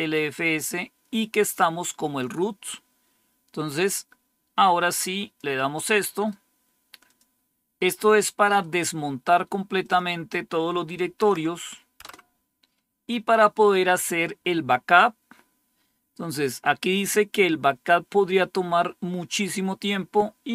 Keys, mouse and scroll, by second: 1.2 click, 3.6-5.3 drag, 6.1 right click, 6.3 right click, 7.0 click, 8.5 right click, 9.7 click, 11.1 Tab, 11.3 Right, 11.9 Return, 14.7-15.3 scroll down 1, 15.3-16.0 scroll down 1, 16.0-19.3 scroll down 1, 19.3 scroll down 1.